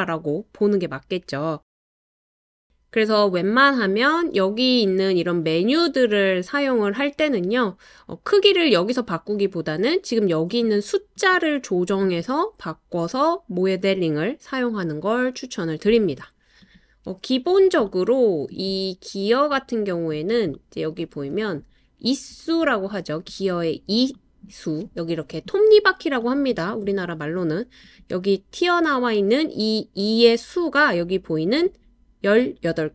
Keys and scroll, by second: 2.0 BackSpace, 18.0 typing, 19.7 Return, 19.7 typing.